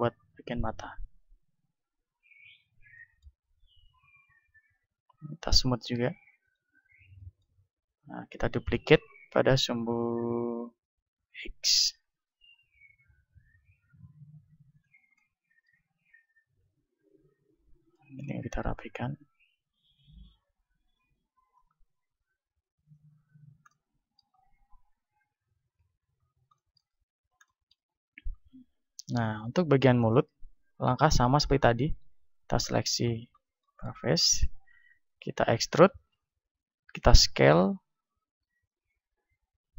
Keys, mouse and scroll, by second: 2.3-6.3 middle drag, 6.3-11.6 drag, 11.6 shift+d, 14.8-19.9 drag, 16.0 right click, 16.3 Tab, 17.9-19.9 right drag, 21.6 click, 23.1 Tab, 23.4-24.9 middle drag, 24.9 a, 25.8 KP_1, 26.8 z, 27.8-29.1 middle drag, 27.8 z, 29.1 Tab, 29.1-30.8 right drag, 30.5 ctrl+Tab, 31.4 right click, 32.4 middle click, 33.8-35.8 middle drag, 34.4 e, 37.0-38.0 drag, 37.0 s.